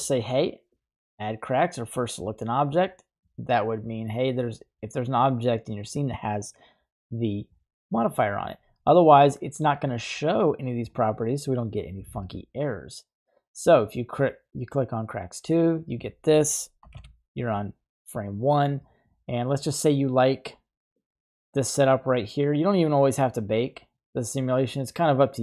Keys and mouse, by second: 0.7 click, 4.4 right click, 14.6 click, 14.7 typing, 17.0 shift+Left, 20.9-22.6 drag, 23.7-25.4 middle drag.